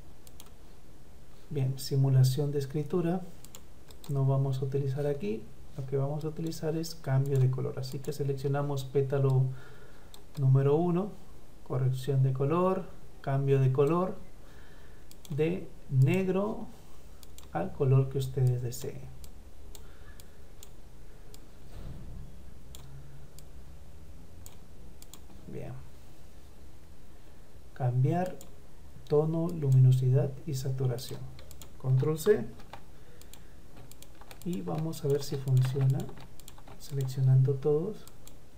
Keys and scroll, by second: 32.2 ctrl+c, 38.4 ctrl+v.